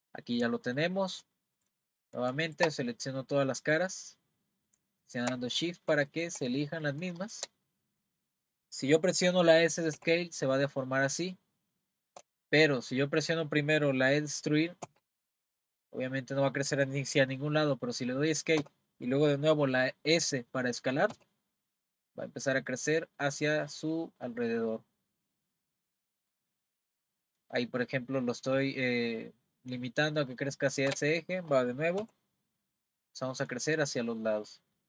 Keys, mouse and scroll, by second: 1.6 click, 1.9 middle click, 2.5 shift+click, 2.8 middle click, 3.7 click, 4.3-5.0 middle drag, 5.0 shift+click, 5.5-6.1 middle drag, 6.1 shift+click, 6.6 middle click, 7.2 shift+click, 7.7-10.0 middle drag, 10.0 s, 12.9-14.8 middle drag, 14.8 e, 21.1 s, 32.0 s.